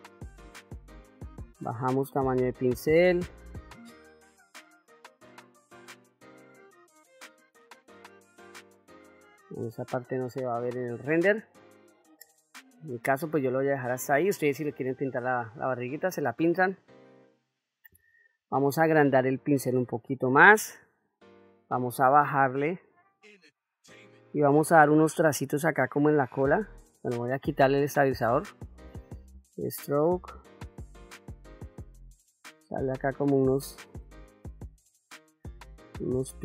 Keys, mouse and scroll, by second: 1.4 click, 2.8 click, 3.9 middle click, 4.5 middle click, 5.3 ctrl+z, 5.6 middle click, 7.1 click, 8.1 click, 8.5 middle click, 9.4 middle click, 10.0 ctrl+middle click, 11.2 middle click, 11.9 shift+middle click, 12.5 middle click, 13.1 ctrl+middle click, 14.8 shift+middle click, 15.7 ctrl+middle click, 17.0 middle click, 18.4 f, 21.4-23.6 shift+f, 24.0 middle click, 24.9 shift+middle click, 25.6 click, 29.3-30.7 drag, 30.8 middle click, 31.7 click, 32.9 middle click, 33.8 click, 34.8 middle click, 35.5-36.4 drag.